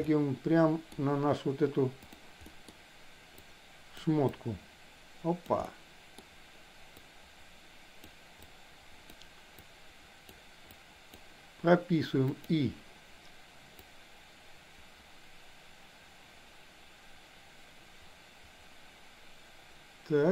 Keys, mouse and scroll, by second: 2.4 middle click, 3.3 click, 4.3-5.4 drag, 5.6 middle click, 6.9-8.1 drag, 8.4 click, 9.6 click, 10.7 click, 12.3 click, 13.8-20.3 drag.